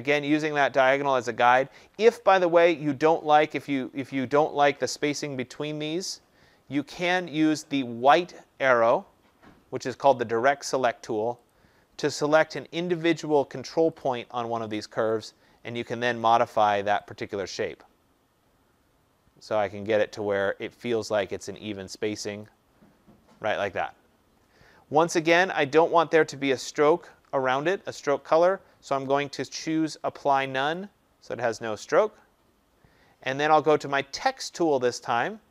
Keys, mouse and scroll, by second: 11.4 click, 14.0 click, 16.1 click, 22.4 click, 30.7 click.